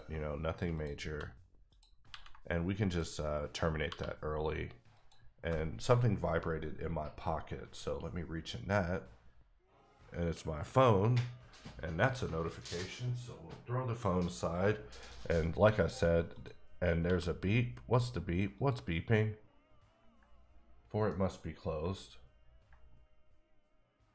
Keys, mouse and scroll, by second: 0.7 click, 1.1 f, 1.7 click, 2.2 ctrl+x, 2.8 click, 3.8 f, 4.9 click, 15.6 click, 15.7 middle click, 16.3 click, 17.0 f, 18.5 click.